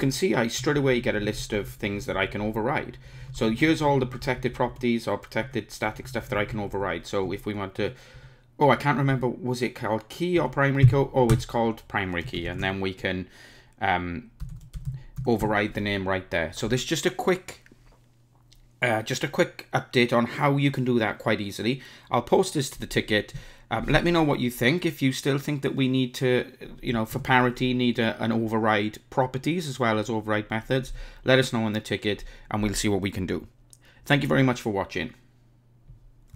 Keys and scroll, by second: 11.3 Return, 27.2 super+n.